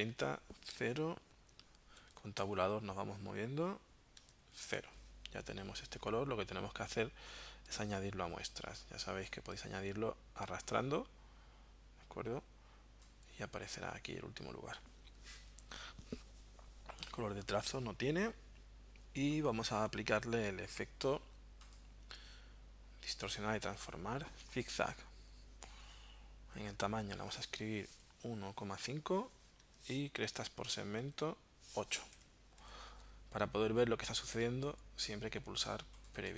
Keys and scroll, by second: 0.0-0.3 typing, 2.0 Tab, 2.2-3.1 typing, 4.2 Tab, 4.4 0, 4.6 Tab, 27.4-28.9 typing, 29.6 Tab, 31.0 Tab, 32.2 8, 32.6 Tab.